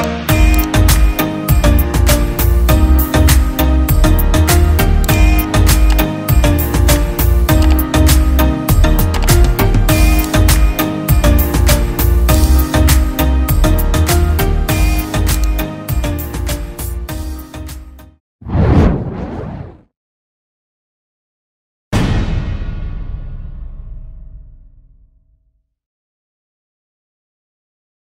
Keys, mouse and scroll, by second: 1.7-2.1 scroll down 1, 6.3-7.0 scroll down 1, 10.7-12.3 scroll down 1, 13.6 typing, 17.6 typing.